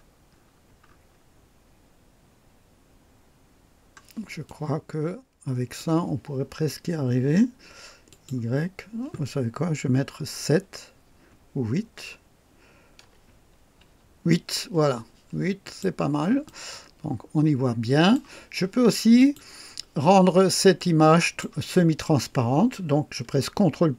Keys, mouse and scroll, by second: 2.0 scroll up 1, 2.5-3.1 scroll down 2, 4.5-6.0 drag, 8.1 click, 10.4 KP_7, 13.0 BackSpace, 13.8 KP_8, 15.7 click, 16.5-18.3 drag, 19.2 click, 20.2-20.5 scroll down 1, 20.8-21.6 drag.